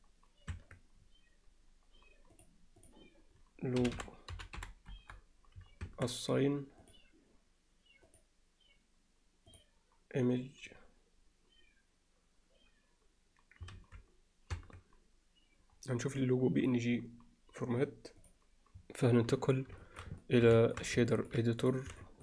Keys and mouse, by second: 1.1 Tab, 3.0-5.2 drag, 5.9 Tab, 6.9 click, 8.1-9.6 drag, 13.8 ctrl+s, 15.2 Tab, 19.5 drag, 19.9 alt+shift+middle click, 20.2 ctrl+alt+middle click, 20.6 alt+shift+middle click, 21.1 ctrl+alt+middle click, 21.6 click.